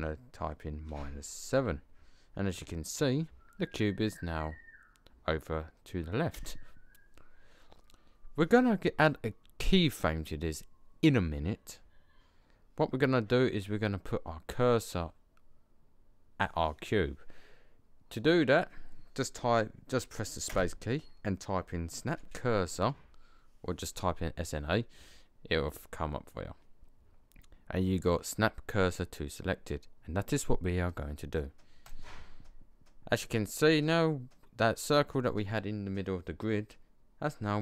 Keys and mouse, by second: 20.5 space.